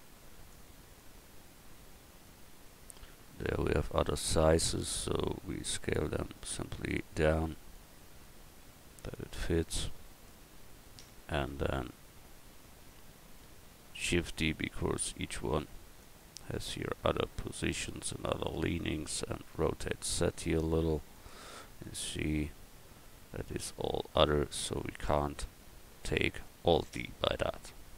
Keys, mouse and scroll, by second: 5.1 s, 8.5 click, 9.9 middle click, 13.9 shift+d, 19.5 r.